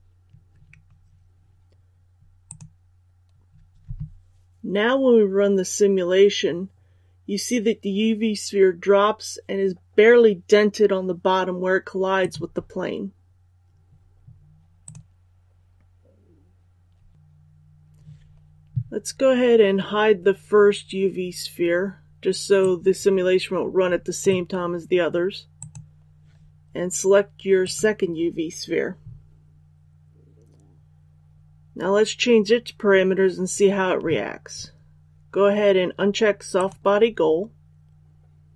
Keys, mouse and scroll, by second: 2.3 click, 11.3-26.5 drag, 27.5-28.5 right drag, 36.4-37.5 drag.